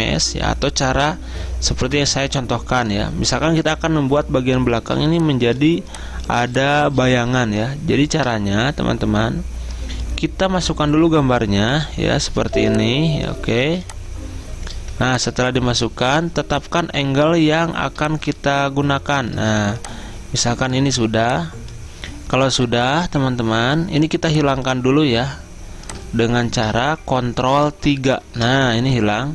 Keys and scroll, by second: 1.9 Delete, 4.9 z, 7.5 alt+Tab, 12.5 z, 13.7 z, 14.9 v, 28.1 ctrl+3, 28.2 ctrl+3.